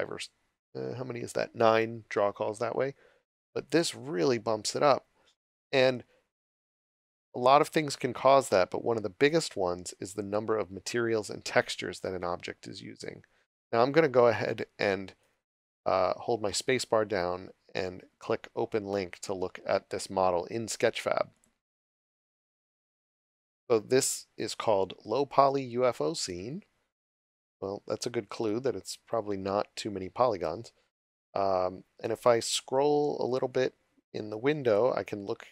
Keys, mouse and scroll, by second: 13.4 s, 14.0 w, 15.2 s, 16.7 space, 21.3 click, 30.8 scroll down 1, 33.1 right click, 33.5 s, 34.6 click, 34.9-35.5 scroll down 1.